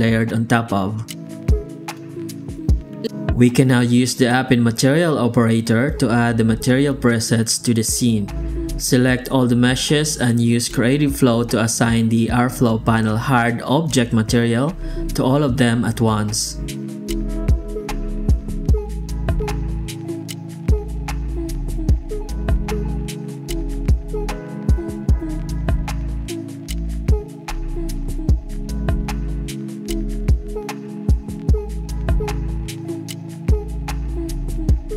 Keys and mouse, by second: 6.0 shift+q, 9.0 right click, 9.3 alt+shift+z, 9.8 shift+g, 10.5 alt+shift+z, 10.8 ctrl+shift+x, 17.2 z, 18.3 alt+shift+z, 18.9 alt+shift+z, 19.5 ctrl+space, 21.9 click, 22.5 click, 23.5 click, 24.2 click, 24.9 click, 26.0 click, 26.9 click, 30.2 click, 32.4 x, 32.6 shift+a.